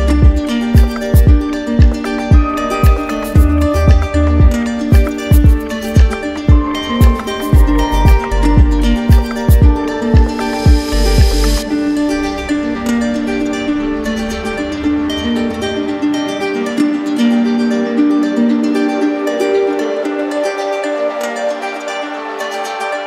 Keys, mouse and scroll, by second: 1.9 click, 3.7 click, 4.4 right click, 5.0 alt+right click, 5.9 right click, 6.6 alt+right click, 8.1 alt+right click, 10.8 alt+right click, 11.2 alt+right click, 12.5 alt+right click.